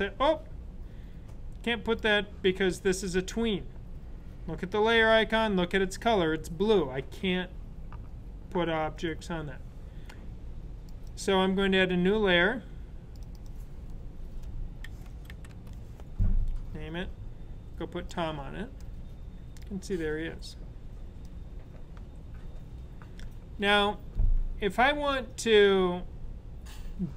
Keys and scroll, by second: 14.6-15.8 typing.